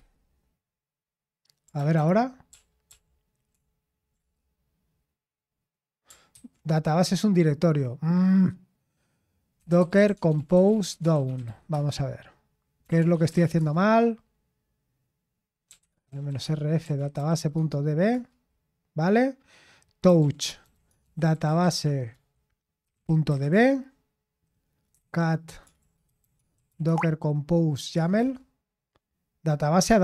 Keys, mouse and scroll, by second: 0.0-0.6 typing, 1.6 typing, 1.7 Return, 1.9 ctrl+p, 2.5 ctrl+p, 2.8 ctrl+p, 6.3 Return, 10.0-13.8 typing, 15.4-18.6 typing, 19.9-28.6 typing.